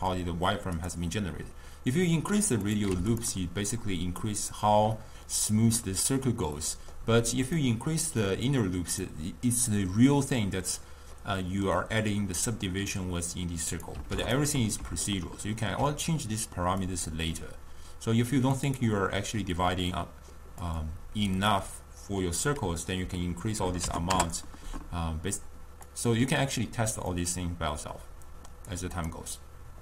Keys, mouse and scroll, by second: 0.8 click, 2.7 click, 5.0-7.7 middle drag, 7.7-10.7 drag, 11.3-13.8 middle drag, 13.8 click, 15.1-16.9 ctrl+middle drag, 16.9-20.8 drag, 21.5-24.5 drag, 26.0-29.2 drag.